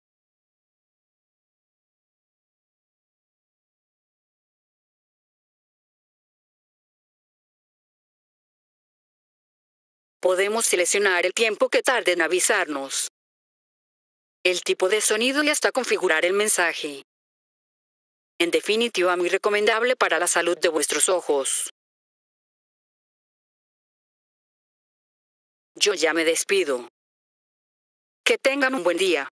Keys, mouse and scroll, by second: 6.8 F4, 7.4 click, 9.1 F4, 10.1 click, 11.8-13.6 drag, 15.8 click, 16.8 click, 18.8 click, 19.3 click, 20.1 click, 20.5-22.0 typing, 23.5 click, 25.2 F4, 25.6 click.